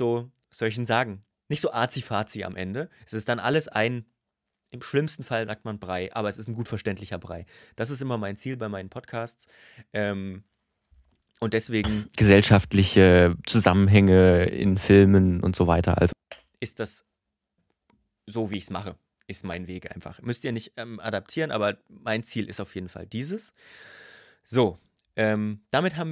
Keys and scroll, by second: 11.6 space, 15.9 space.